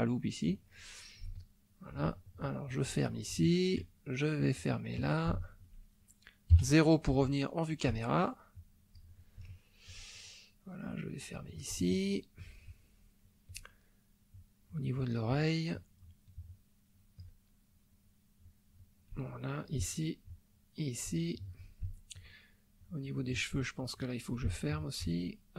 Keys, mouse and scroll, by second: 1.4 ctrl+middle click, 2.6 click, 3.3 shift+middle click, 4.4 click, 5.3 shift+middle click, 6.6 KP_0, 7.3 shift+middle click, 8.5 click, 9.5 shift+middle click, 10.8 click, 11.9 shift+middle click, 12.7 shift+middle click, 13.2 shift+middle click, 14.3 click, 15.5 shift+middle click, 16.2 shift+middle click, 16.9 shift+middle click, 18.4 click, 19.3 shift+middle click, 20.3 click, 21.2 shift+middle click, 21.8 shift+middle click, 22.8 click, 23.7 shift+middle click, 24.5-25.5 shift+middle drag.